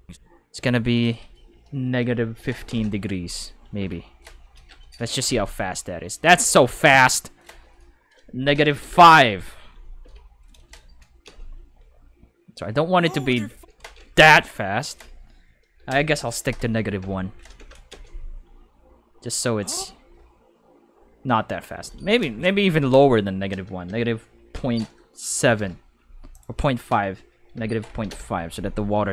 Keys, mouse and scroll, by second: 0.9 click, 1.9 5, 2.7 Return, 3.7 i, 5.2 space, 6.2 space, 7.4 click, 8.4 -, 8.7 5, 8.8 Return, 10.0 i, 11.2 space, 13.4 space, 14.8 click, 15.4-17.9 typing, 22.9 click, 23.9 -, 24.5 ., 25.4 7, 26.3 click, 27.3-29.1 typing.